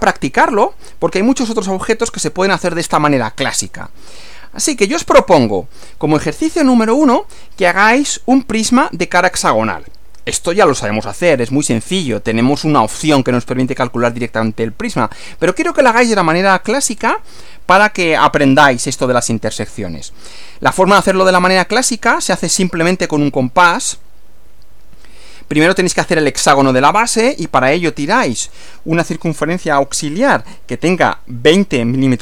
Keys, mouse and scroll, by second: 4.7 click, 24.5 Right.